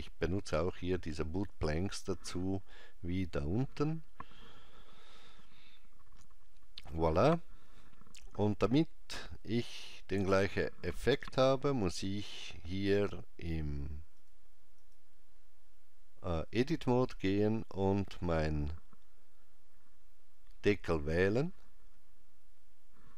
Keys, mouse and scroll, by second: 1.8 click, 11.9 Tab, 12.9 click, 14.9 click, 17.6 click.